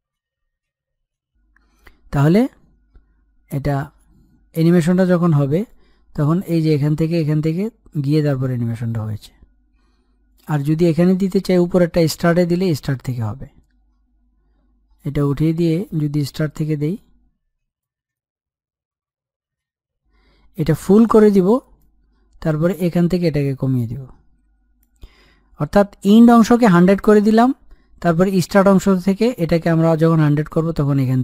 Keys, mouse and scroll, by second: 8.8-12.4 drag, 14.8-27.0 drag, 28.2-31.2 drag.